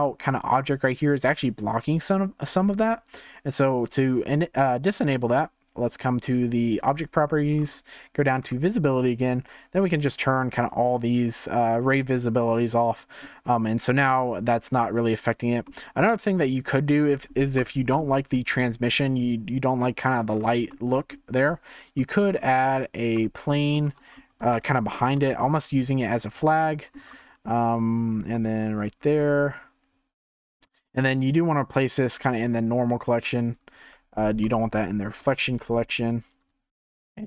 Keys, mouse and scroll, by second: 0.0-10.6 shift+middle drag, 10.6-13.5 drag, 15.6-17.5 middle drag, 17.5 KP_0, 17.9 scroll up 4, 19.7-20.2 middle drag, 20.2-20.7 scroll down 4, 20.7-23.2 middle drag, 23.2 shift+a, 23.4-23.8 middle drag, 23.8 r, 26.6 middle click, 27.0 g, 29.1 g, 31.2 click, 33.5 click, 34.4 KP_0, 35.0-35.7 scroll down 2, 35.7 s, 36.4 right click.